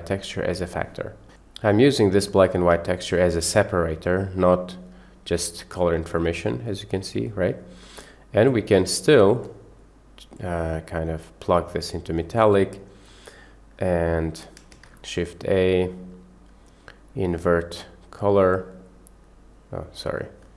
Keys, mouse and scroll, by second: 1.3 click, 3.3 click, 4.5 click, 8.0 middle click, 8.6 click, 9.5 click, 9.7 click, 10.4-12.2 drag, 14.7 shift+a, 20.0 drag, 20.3-20.5 drag.